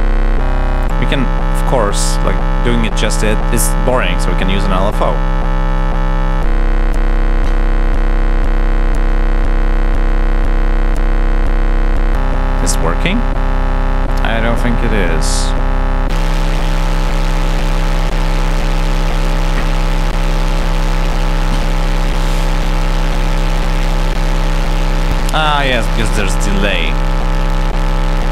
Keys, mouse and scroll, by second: 4.6 click, 5.6 click, 7.0-8.1 drag, 8.6 click, 9.6 click, 11.7 click, 14.3 click, 21.1 click, 25.8 click, 27.7 click.